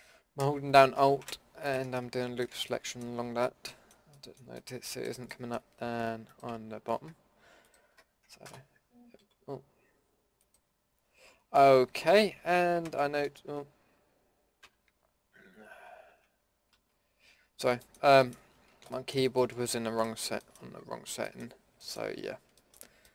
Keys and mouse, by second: 1.2 End, 6.3 click, 8.5 Return, 9.2 Delete, 20.8-21.9 middle drag.